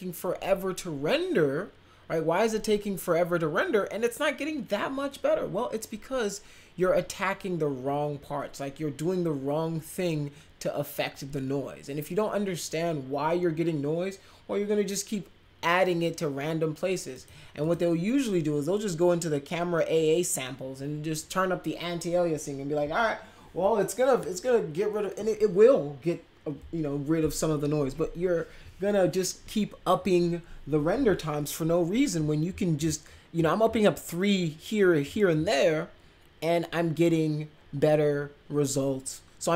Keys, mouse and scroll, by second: 17.1 click, 17.6 click.